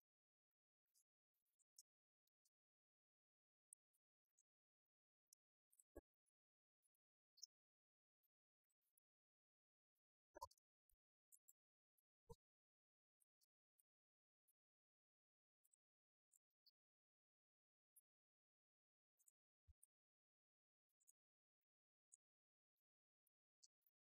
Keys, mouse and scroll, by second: 3.5-4.9 drag, 6.5-7.9 drag.